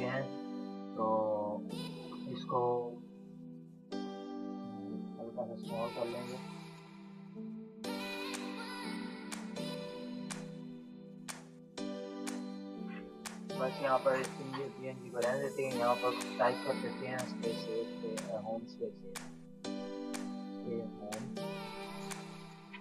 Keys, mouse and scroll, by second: 0.1 Return, 1.3 v, 2.3 click, 3.8 ctrl+-, 4.4 click, 5.5 ctrl+z, 6.4 click, 7.2 ctrl+click, 7.9 ctrl+t, 8.7 shift+click, 9.7 ctrl+z, 10.3-13.3 shift+drag, 13.3 Delete, 13.8 ctrl+-, 14.3 Delete, 15.0 ctrl+-, 16.0 ctrl+=, 17.2 t, 17.9 click, 19.5-22.8 typing.